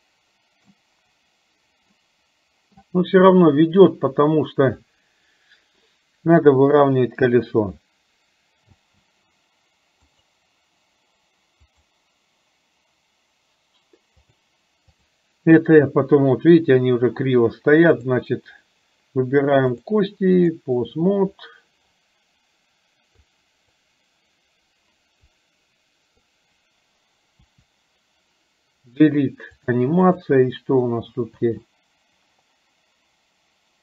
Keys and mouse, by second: 0.0-1.0 middle drag, 2.2-3.2 middle drag, 6.7 KP_7, 9.0 space, 10.3 click, 11.8 click, 14.5 click, 19.8 click, 23.3 click, 25.3-26.3 drag, 27.5 Delete, 29.7 click, 31.5 space.